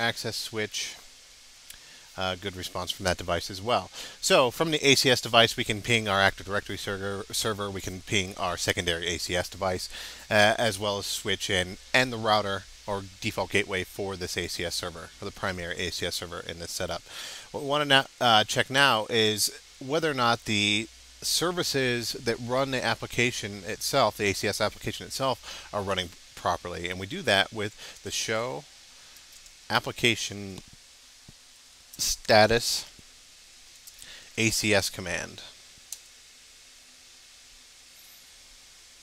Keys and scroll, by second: 32.3 space, 34.2 space, 36.9 space.